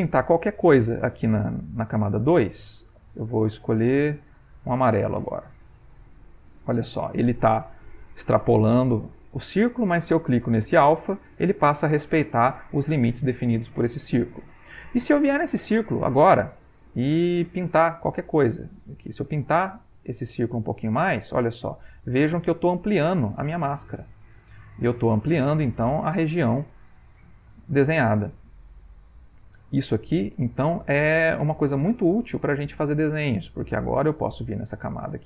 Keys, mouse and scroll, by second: 2.1 right click, 4.4 click, 5.3 click, 6.1-9.6 drag, 10.9 click, 13.9 click, 17.2 right click, 18.0 click, 19.1 click, 19.9-33.6 drag.